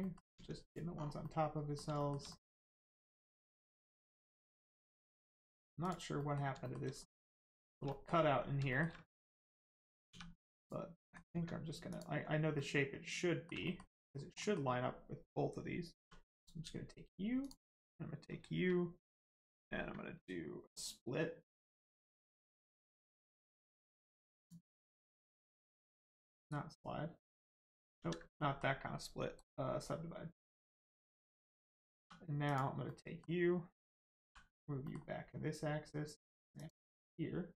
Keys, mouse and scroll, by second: 0.0 middle click, 0.3 Tab, 0.6 click, 1.2 middle click, 2.0 shift+middle click, 2.2 middle click, 2.3 middle click, 2.7 scroll down 1, 2.9 middle click, 4.2-4.7 scroll down 1, 4.7 middle click, 5.8 click, 6.2 middle click, 6.6 shift+middle click, 7.0 scroll up 1, 7.2 middle click, 7.6 shift+middle click, 7.8 middle click, 8.7 shift+middle click, 10.6 click, 11.0 middle click, 11.3 Tab, 11.9 click, 12.5 middle click, 13.6 shift+middle click, 13.9 middle click, 14.0 middle click, 15.9 2, 16.3 click, 17.4 shift+click, 20.7 right click, 24.3 click, 25.2 right click, 25.7 middle click, 26.3 right click, 27.3 click, 27.9 ctrl+z, 28.3 middle click, 29.3 right click, 30.5 click, 31.9 2, 32.4 click, 32.8 middle click, 34.2 g, 34.8 middle click, 36.5 ctrl+click, 36.9 middle click, 37.0 middle click.